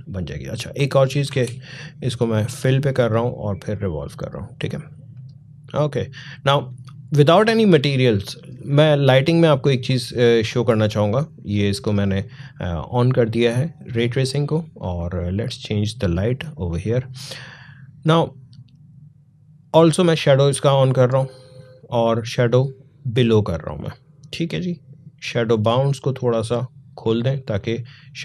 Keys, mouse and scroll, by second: 0.8 click, 1.1 ctrl+z, 2.2-7.9 drag, 15.1 click, 20.0 click, 25.2-28.2 drag.